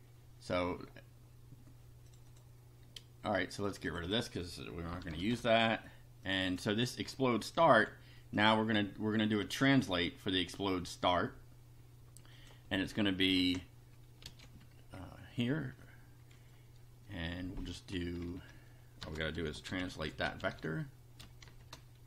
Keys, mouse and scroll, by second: 2.1 click, 3.7 click, 4.9 BackSpace, 6.3 click, 7.6 ctrl+c, 8.3 click, 12.3 click, 13.3 Return, 14.3 ctrl+v, 18.4 Home, 19.1-21.5 typing.